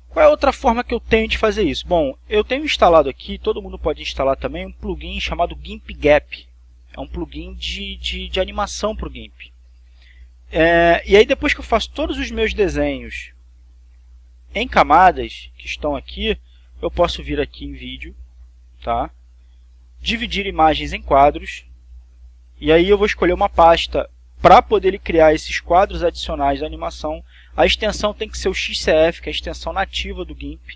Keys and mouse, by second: 0.1 click, 9.1 click, 13.8 click, 14.9 click, 16.6 click, 18.3 click, 21.8 click.